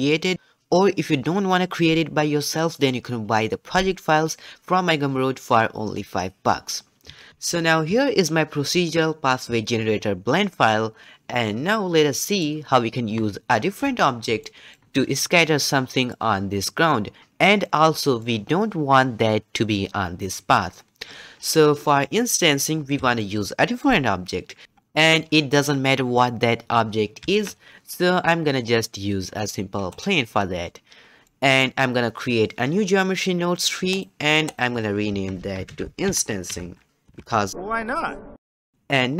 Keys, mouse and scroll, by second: 11.5-20.7 middle drag, 23.2-27.2 shift+middle drag, 27.2 shift+a, 31.2-33.9 middle drag, 33.9-35.4 drag, 39.0 scroll up 2.